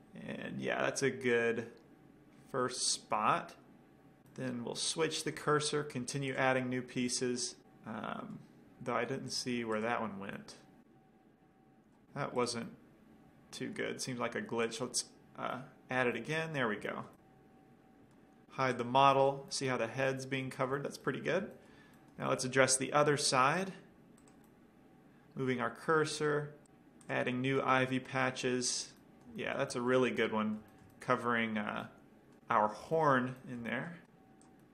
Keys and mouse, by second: 1.5-1.9 middle drag, 3.1 middle drag, 5.6-7.5 right drag, 6.5-7.6 drag, 7.7 middle click, 8.1-8.8 middle drag, 9.6 click, 10.6-11.3 middle drag, 12.8-14.6 middle drag, 15.3-16.0 drag, 19.0-21.0 drag, 20.2-23.1 middle drag, 23.8-25.6 drag, 23.8 middle click, 24.6-26.6 middle drag, 24.6-25.7 right drag, 25.7-26.2 drag, 27.3-29.0 drag, 28.6-31.3 middle drag.